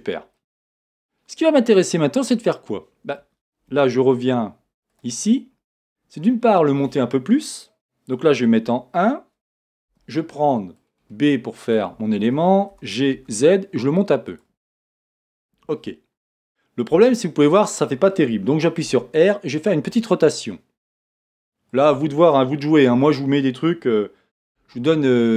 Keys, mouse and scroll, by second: 0.5-4.9 middle drag, 3.2-4.3 scroll up 1, 4.9 click, 5.7 click, 5.7-9.9 middle drag, 6.7-7.8 scroll up 2, 7.8-8.6 scroll up 1, 8.6 KP_1, 9.9 b, 12.7 g, 14.4-17.1 middle drag, 14.4 click, 17.0 KP_1, 17.1-18.4 middle drag, 18.8 r, 21.7 click, 22.9 g.